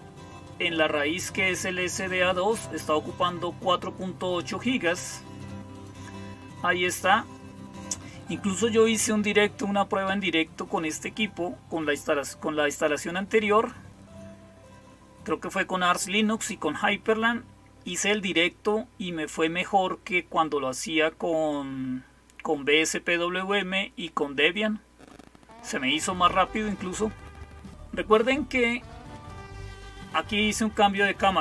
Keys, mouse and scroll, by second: 0.3-2.2 drag, 3.0 click, 4.1 click, 5.6 click, 6.7 click, 29.0 click.